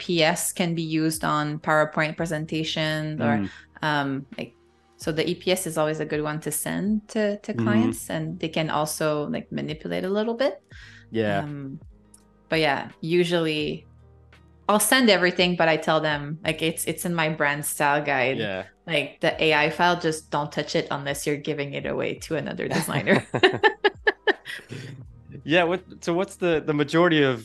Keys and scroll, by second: 2.6 super+=, 3.0 space, 8.5 super+z, 9.1 -, 10.9 a, 18.1 -, 20.2 a.